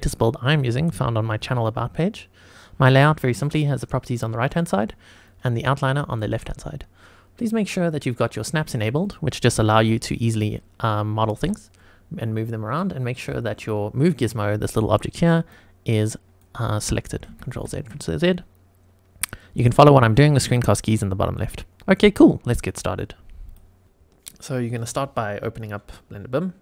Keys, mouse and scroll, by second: 3.5 click, 5.2 click, 7.9 click, 9.0 click, 9.7 g, 11.4 Escape, 13.1-14.3 drag, 15.1 click, 16.1 click, 17.2 ctrl+z, 17.5 ctrl+z, 19.8 click, 23.8 click, 24.7 click.